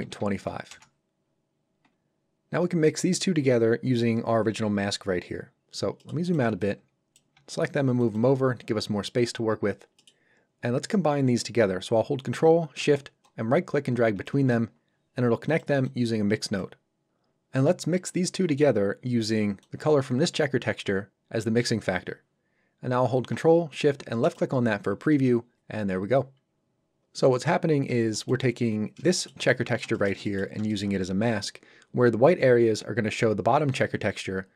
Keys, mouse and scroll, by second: 0.0 KP_2, 0.7 Return, 5.4 scroll down 1, 6.0 middle click, 6.2 click, 6.5 b, 6.6 click, 7.3 g, 8.0 click, 9.3 scroll up 1, 10.0 middle click, 10.2-10.5 scroll up 1, 13.2 ctrl+shift+right click, 15.5 shift+right click, 15.5 click, 19.6 click, 24.2 ctrl+shift+click, 28.1 ctrl+shift+click, 28.8 shift+scroll up 2, 29.1 shift+middle click, 29.4 ctrl+middle click, 29.9 shift+middle click, 30.6 shift+middle click.